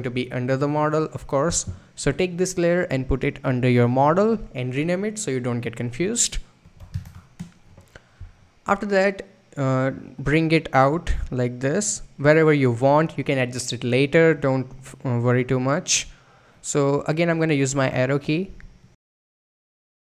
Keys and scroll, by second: 6.3-7.5 typing, 17.0 Up, 19.7 Left.